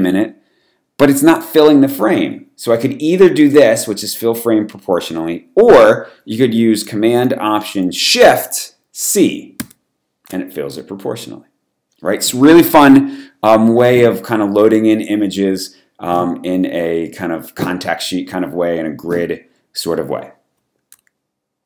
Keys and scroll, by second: 9.6 alt+shift+super+c.